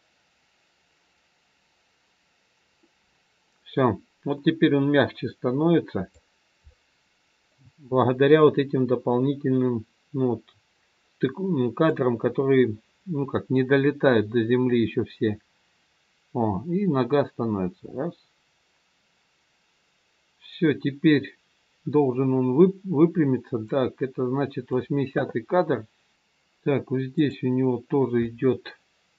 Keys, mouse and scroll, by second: 6.5 middle click, 8.4 click, 13.6 click, 27.0 click, 28.2 middle click.